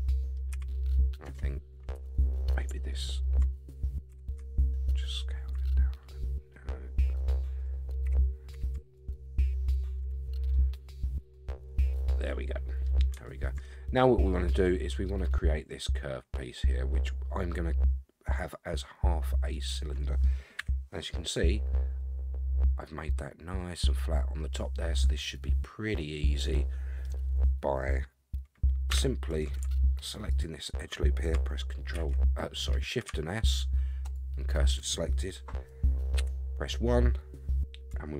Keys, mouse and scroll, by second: 0.5 a, 1.2 Tab, 1.9 space, 2.1 space, 2.9 alt+click, 4.1 s, 8.0 g, 10.1 Tab, 10.4 scroll down 1, 10.5-12.9 middle drag, 13.2-13.6 shift+middle drag, 13.9-14.5 scroll up 2, 14.5-15.0 middle drag, 19.5-20.2 middle drag, 20.6 KP_1, 24.5-27.0 middle drag, 28.9 Tab, 30.3 alt+click, 31.9 shift+s, 36.2 KP_1.